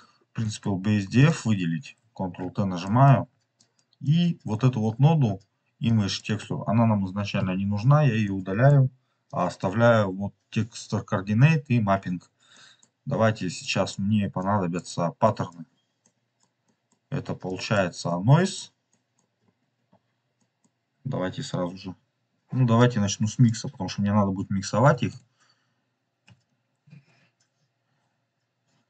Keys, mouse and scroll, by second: 0.3 middle click, 1.1 click, 2.4 ctrl+t, 2.8 middle click, 3.5-4.0 drag, 4.4-5.4 scroll up 2, 5.8 click, 7.3 Delete, 7.7 scroll down 2, 8.2 middle click, 9.2 click, 9.8 scroll up 2, 11.9-12.3 scroll down 2, 12.5 middle click, 13.6 click, 15.3 click, 15.9-17.4 middle drag, 17.4 click, 18.0 click, 18.8 middle click, 19.2-19.8 scroll down 3, 19.8-20.3 scroll up 3, 20.3 middle click, 22.7-25.7 drag, 25.8-28.8 drag.